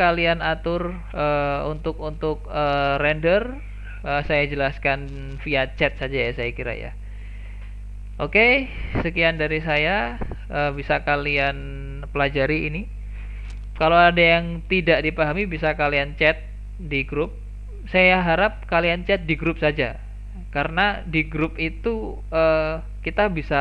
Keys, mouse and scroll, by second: 0.9-1.5 scroll down 2, 1.5-2.1 scroll down 3, 2.1-3.5 scroll up 5, 3.5-5.6 scroll down 5, 5.6-6.5 scroll down 1, 9.8 click.